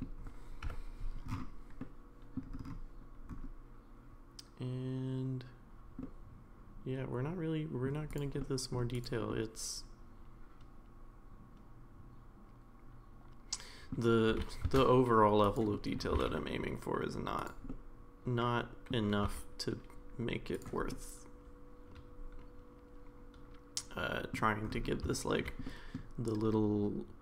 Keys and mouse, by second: 0.6 KP_Decimal, 1.8-2.4 middle drag, 6.0-7.9 middle drag, 8.1 click, 8.4-8.7 middle drag, 8.9 click, 9.3-13.9 middle drag, 14.3 g, 15.7 middle click, 16.1 g, 17.7-18.9 middle drag, 19.2 r, 20.9-24.3 middle drag, 25.1 shift+middle drag, 25.6 middle drag.